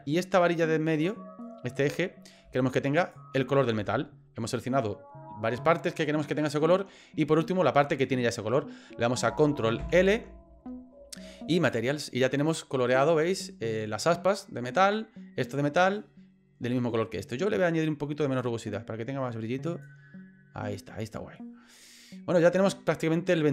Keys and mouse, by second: 0.9 shift+right click, 3.0 shift+right click, 9.8 ctrl+l, 12.4 right click, 18.4-19.9 drag, 23.4 middle click.